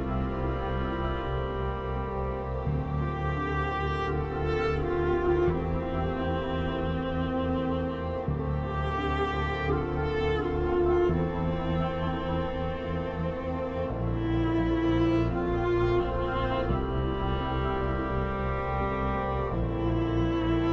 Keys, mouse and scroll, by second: 2.9 click, 4.3 p, 4.9-12.3 drag, 12.8-15.8 drag, 18.7 c, 19.6-20.7 drag.